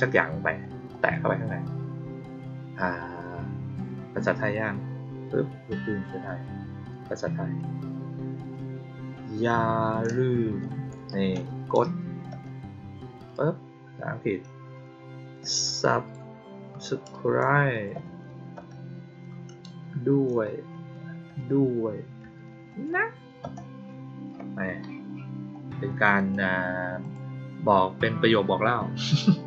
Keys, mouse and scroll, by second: 0.8 click, 26.1 click, 26.9 click.